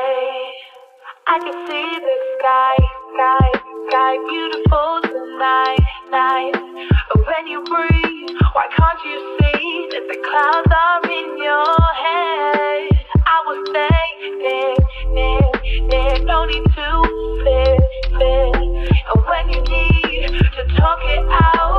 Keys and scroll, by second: 4.2 t.